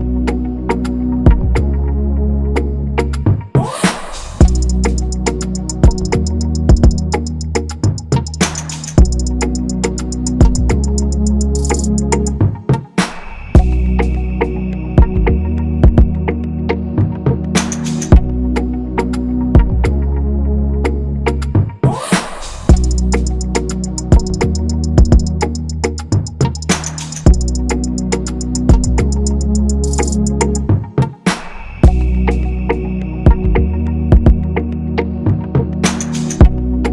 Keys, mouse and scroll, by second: 2.3 typing, 4.5 click, 8.7 alt+click, 13.7 typing, 22.1 ctrl+s, 22.7 shift+click, 26.8 shift+click, 28.2 double click.